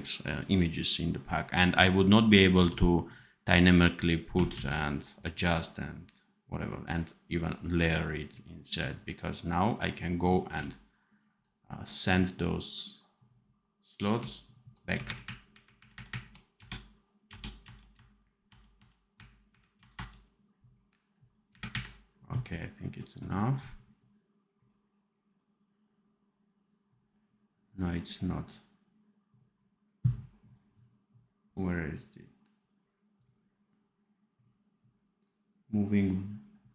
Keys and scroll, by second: 2.5 v, 4.4 ctrl+z, 15.0 shift+KP_Subtract, 15.9 shift+KP_Subtract, 16.5 KP_Add, 17.6 KP_Add, 18.5 KP_Add, 19.1 KP_Subtract, 19.7 KP_Add, 21.4 KP_Subtract.